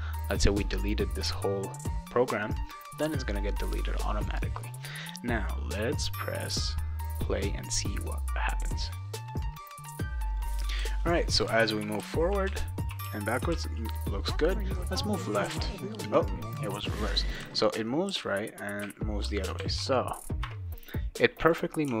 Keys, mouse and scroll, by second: 4.6 click, 5.7 click, 10.8-13.5 typing, 15.4 a, 17.4-20.1 typing, 21.4 click.